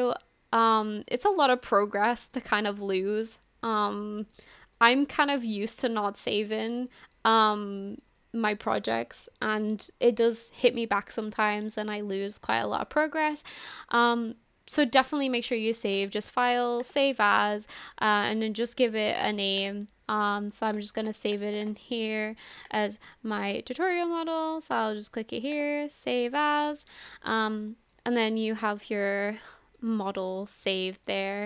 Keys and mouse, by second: 1.5 shift+middle click, 2.4 middle click, 3.4 shift+middle click, 4.0 middle click, 4.2 click, 4.2 right click, 4.8 shift+click, 4.8 shift+right click, 5.5 click, 6.9 shift+middle click, 7.5 middle click, 16.0-17.2 drag, 27.9-28.6 middle drag, 28.8 shift+middle drag, 29.2-29.8 middle drag, 30.3 shift+middle click, 30.6 middle click.